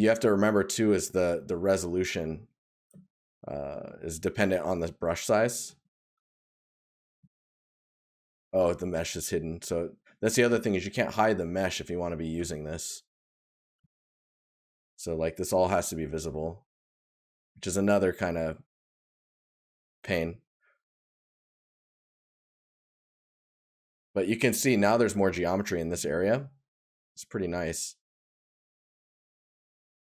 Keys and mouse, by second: 6.1 right click, 13.7 right click, 27.1 right click.